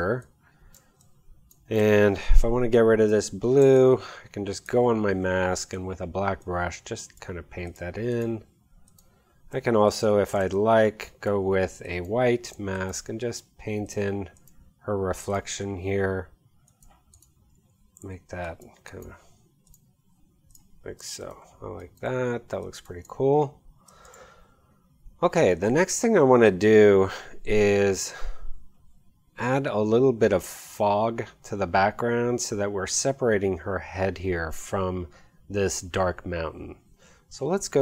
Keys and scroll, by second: 3.1 b, 3.7 alt+b, 10.0 x, 18.0 x, 21.0 space, 24.1 v.